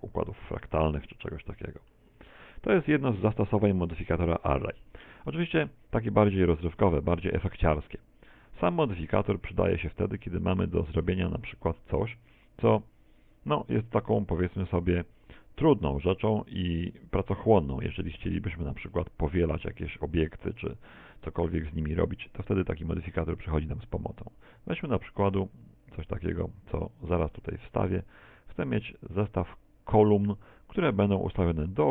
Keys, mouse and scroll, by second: 0.8 scroll down 1, 1.4 shift+middle click, 2.1-2.8 scroll up 4, 3.1 middle click, 4.2 middle click, 4.8-5.4 scroll down 2, 5.4 shift+middle click, 5.4-5.7 scroll down 1, 6.0 right click, 6.7 x, 7.5 right click, 7.7 x, 8.4 right click, 8.6 x, 9.3 middle click, 10.1 middle click, 11.6 middle click, 11.6 shift+a, 18.3 s, 19.9 click, 20.3 shift+middle click, 21.0 shift+a, 24.5 click, 28.1 s, 30.1 click, 30.3 middle click.